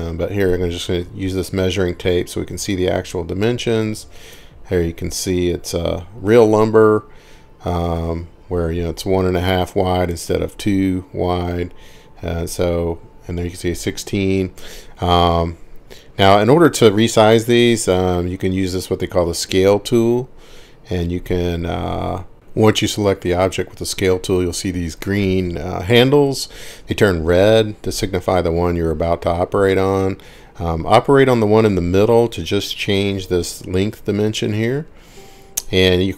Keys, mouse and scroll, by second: 4.2 click, 8.0 click, 8.2 click, 12.6 click, 18.9 click, 20.8 click.